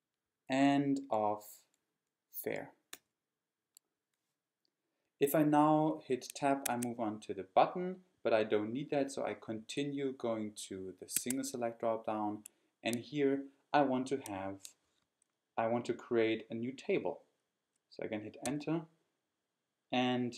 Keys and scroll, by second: 0.2 Down, 1.3 Down, 2.9 Return, 6.7 Tab, 11.2 Tab, 18.5 Return.